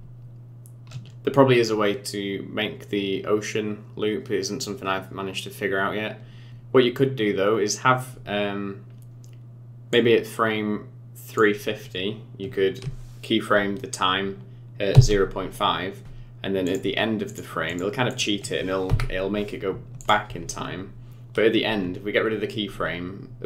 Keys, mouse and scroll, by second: 6.5 scroll down 7, 6.5 space, 8.1-8.9 scroll down 3, 8.9-10.0 scroll up 1, 10.0 click, 14.9 i, 16.6 click, 17.2 click, 17.6 click, 18.1 click, 18.8 Delete.